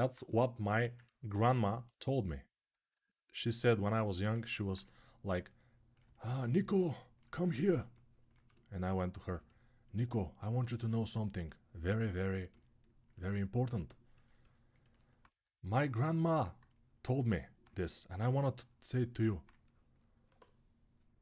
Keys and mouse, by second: 1.2-6.1 alt+right drag, 10.3-13.2 alt+right drag.